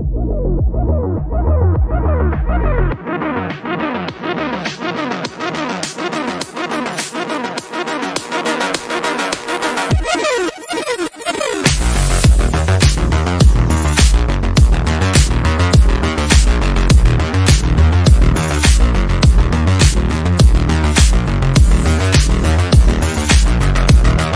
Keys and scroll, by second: 7.4 Delete, 8.4 F3, 8.5 Escape, 18.1 Delete, 22.2-24.3 typing.